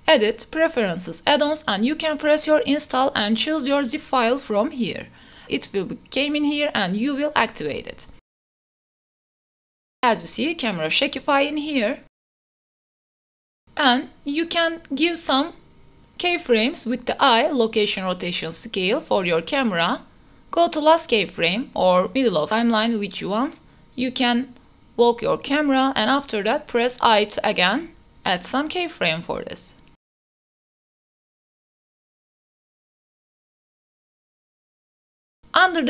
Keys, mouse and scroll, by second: 0.7-1.4 drag, 15.1-15.5 drag, 15.5 space, 16.3 space, 17.2 click, 18.2 i, 23.8-25.6 drag, 26.2 q, 27.2-28.4 w, 29.0 i, 30.4-30.8 drag, 30.8 space, 34.8 space, 34.8 a.